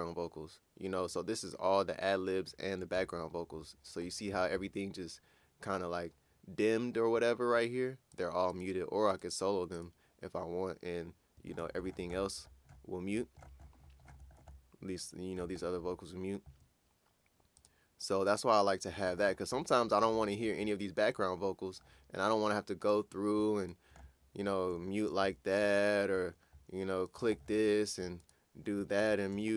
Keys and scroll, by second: 25.3 shift+m, 25.6 shift+m, 29.0 shift+m, 29.3 shift+m.